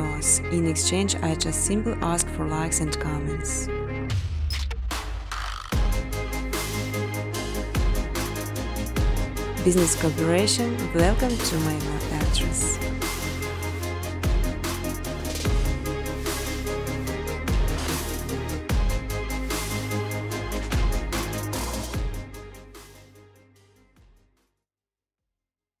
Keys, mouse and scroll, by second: 0.0-0.4 typing, 2.2 click, 2.4 click, 3.7 click, 4.3-5.3 typing, 5.6 click, 6.6 space, 8.9 space, 9.2 space, 10.9 space, 13.5 click, 13.9 space, 15.7 space, 15.9 scroll, 16.7 space, 16.9 middle click, 17.0 middle click, 17.0 scroll, 17.0 space, 17.9 space, 18.0 scroll, 18.1 middle click, 21.5 space, 21.8 space, 22.1 scroll, 23.0-25.8 typing.